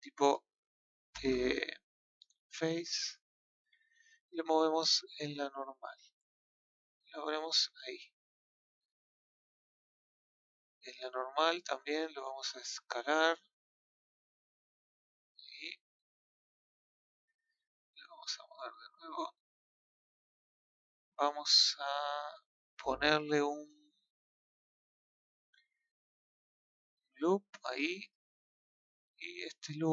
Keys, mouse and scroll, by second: 2.6 KP_1, 4.8 click, 12.3 click, 13.8 click, 18.2 click, 19.3 click, 26.9 click, 27.7 click.